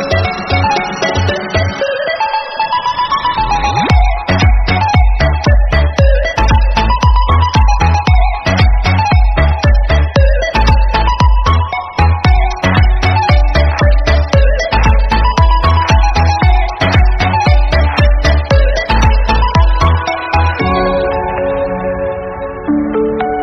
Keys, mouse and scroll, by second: 0.0 click, 0.2 scroll down 2, 0.3 shift+middle click, 0.7 g, 1.6 scroll up 5, 2.1 s, 3.5 scroll down 3, 3.6 shift+middle click, 4.0 1, 4.1 shift+z, 4.3 click, 4.7 s, 5.9 shift+middle click, 6.4 g, 7.5 shift+middle click, 7.6 scroll up 1, 7.8 click, 8.2 shift+middle click, 8.3 scroll up 6, 8.6 shift+middle click, 9.0 ctrl+b, 10.5 scroll down 2, 10.7-11.7 shift+middle drag, 11.7 click, 11.9 scroll up 2, 12.0-12.5 shift+middle drag, 12.5 ctrl+b, 13.3 scroll down 4, 13.5 shift+middle click, 13.8 shift+middle click, 14.0-14.4 scroll up 1, 14.4 ctrl+r, 15.1 scroll down 1, 15.2-15.8 shift+middle drag, 15.8 ctrl+r, 17.0 scroll up 4, 17.2-17.7 shift+middle drag, 17.7 ctrl+b, 19.4 scroll down 2, 19.5 middle click, 19.7 shift+z, 19.9 middle click, 20.1-20.5 scroll up 2, 20.5 i, 21.0-22.5 drag, 22.5 middle click, 23.2 3.